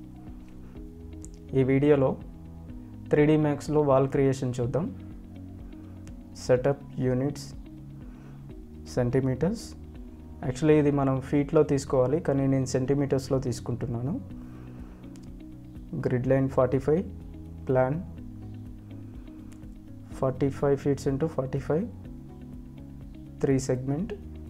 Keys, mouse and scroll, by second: 1.4 alt+w, 3.0 click, 10.6 click, 11.7 right click, 13.3 click, 20.9 Tab, 21.8 g, 21.9 click, 24.0 Tab.